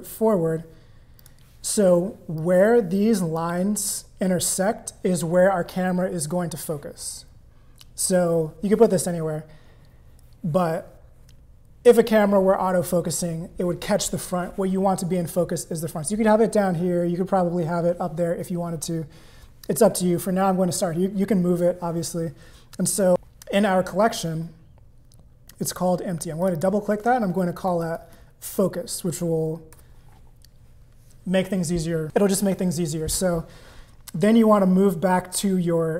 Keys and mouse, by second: 2.4-3.4 drag, 26.4 click, 27.5-30.8 shift+drag.